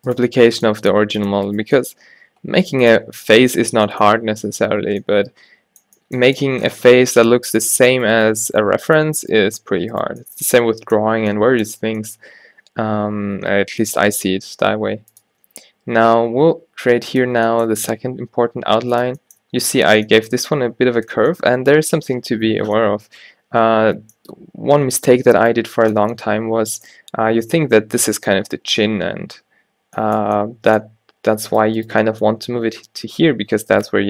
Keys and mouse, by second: 0.5 g, 1.7 g, 3.8 a, 4.2 a, 7.8 g, 8.3 g, 13.3 e, 15.3 e, 18.1 e, 23.5 middle click, 25.5-26.8 middle drag, 27.2-31.6 middle drag, 31.6-34.0 drag, 32.0 g.